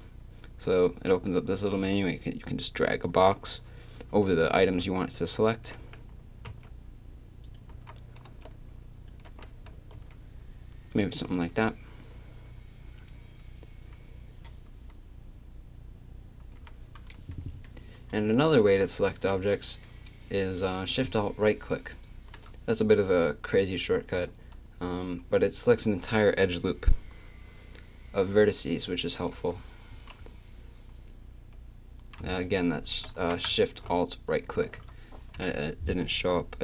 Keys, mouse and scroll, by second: 5.6 g, 7.7 a, 8.2 b, 9.3 g, 11.3 a, 18.6 z, 21.9-33.2 drag, 33.2 a, 34.3-35.4 drag, 35.4 KP_3.